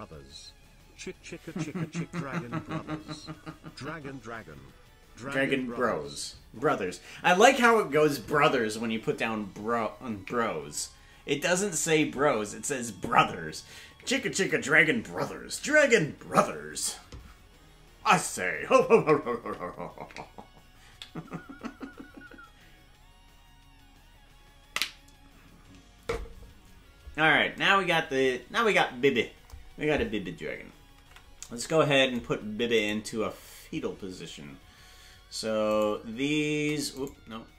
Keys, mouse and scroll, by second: 31.0 ctrl+Tab, 33.1 right click, 36.0 shift+right click, 37.3 right click.